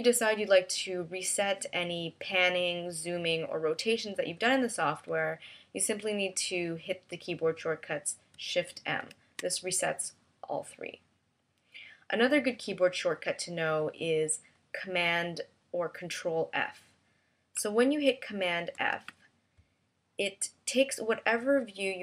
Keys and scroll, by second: 9.5 shift+m, 19.2 super+f.